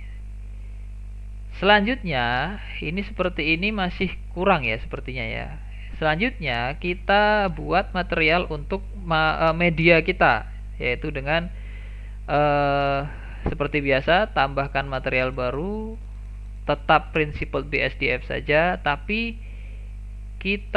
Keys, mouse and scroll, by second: 1.1-1.8 scroll down 3, 1.8-6.9 middle drag, 6.9 click, 12.7-15.5 drag, 15.5-15.9 scroll down 1, 15.9 shift+middle click, 16.4-16.9 scroll down 3, 16.9 shift+middle click, 17.3-17.6 scroll down 3, 17.6-19.0 shift+middle drag, 19.0-20.6 scroll up 1.